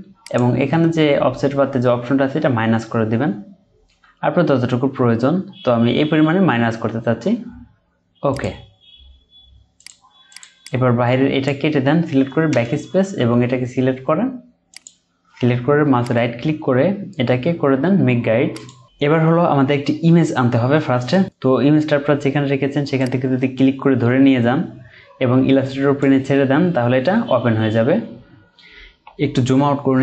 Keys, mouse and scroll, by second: 2.2 Down, 2.6 Down, 3.6 Down, 3.9 Down, 10.6 double click, 12.5 BackSpace, 16.0 right click, 27.9-29.0 alt+scroll down 1, 29.2-29.6 alt+scroll down 1.